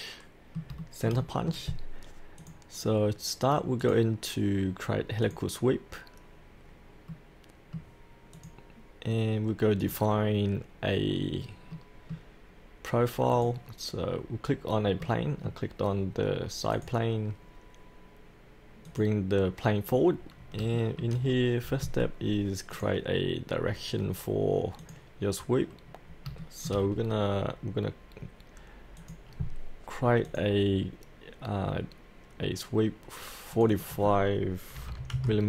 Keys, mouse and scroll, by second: 0.8-2.4 shift+middle drag, 2.4-3.4 drag, 7.1 middle click, 7.5 middle click, 8.3 click, 11.1-11.7 scroll down 1, 11.7 middle click, 13.3 click, 15.0 middle click, 16.7 click, 19.9-20.6 scroll down 1, 20.7 shift+middle click, 21.2-22.7 scroll down 1, 22.7 click, 25.9-26.3 scroll down 1, 26.4 shift+middle click, 26.9-29.0 scroll up 1, 29.0 click, 34.8 KP_4.